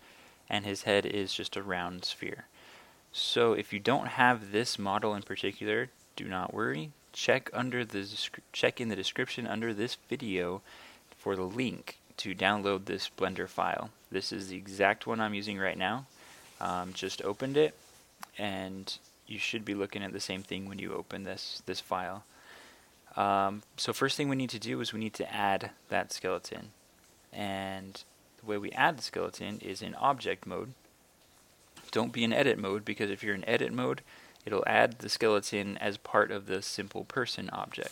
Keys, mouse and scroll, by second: 32.2 Tab.